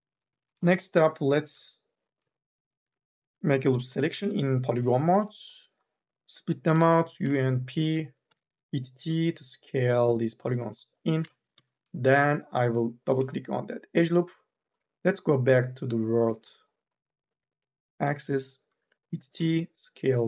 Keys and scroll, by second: 3.0-5.2 typing, 6.8 p, 8.1 t, 11.2 2, 11.4 e, 18.5 t.